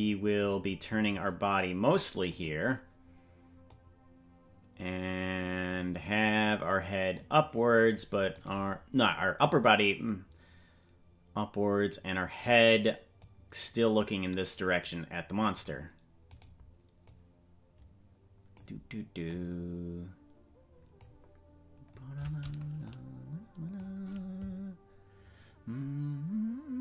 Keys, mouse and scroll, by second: 0.4 right click, 1.1 click, 2.3-3.6 right drag, 3.6-5.7 drag, 7.1 click, 8.4 right click, 9.4-12.4 drag, 13.2 click, 15.5 right click, 17.0-18.6 drag, 19.2-21.0 drag, 22.8 click.